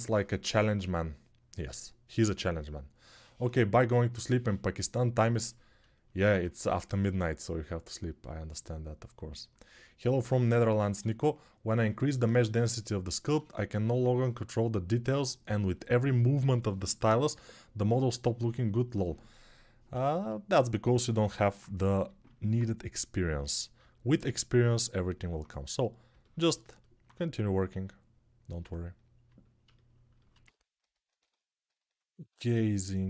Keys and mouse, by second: 11.1-18.8 alt+drag, 18.8-21.1 alt+right drag, 20.3 alt+q, 21.1-30.6 alt+drag, 21.7 g, 30.6-32.3 alt+shift+right drag, 32.3-33.0 alt+drag, 32.9 alt+q.